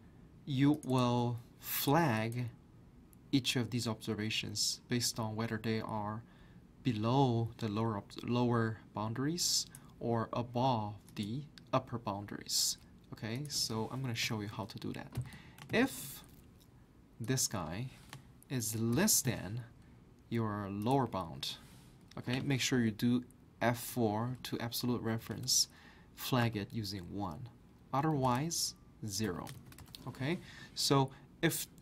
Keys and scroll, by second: 14.2-16.2 typing, 18.7-19.4 typing, 23.9 F4, 25.0-26.9 typing, 28.1-30.0 typing.